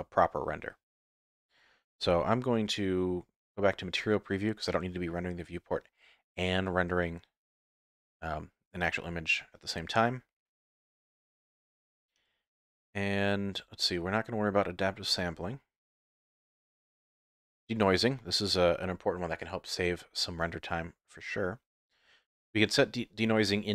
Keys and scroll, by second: 1.9 z.